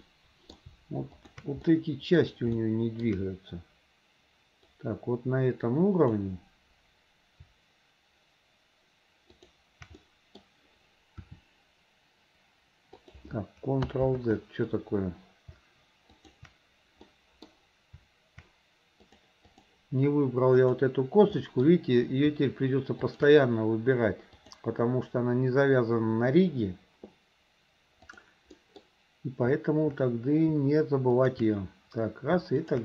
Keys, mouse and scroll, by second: 0.1-0.6 middle drag, 1.2 shift+click, 1.7 middle click, 2.6 shift+middle click, 4.8-6.3 drag, 9.3 shift+click, 10.0 middle click, 12.2 r, 14.2 ctrl+z, 16.2 shift+click, 17.2-17.5 middle drag, 19.0 click, 21.4 middle drag, 23.0 shift+click, 24.4-28.3 drag, 28.6 middle drag, 31.2 shift+click, 32.7 shift+click.